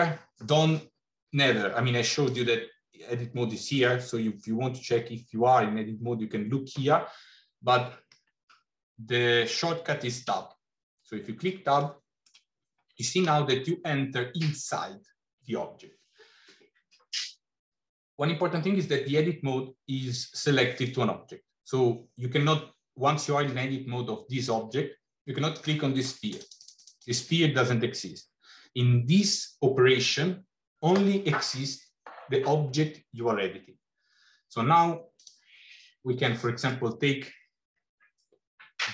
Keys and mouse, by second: 2.1-6.6 drag, 10.4 Tab, 11.8 middle click, 26.1 click, 26.8 click, 35.1 click, 37.2-38.2 middle drag.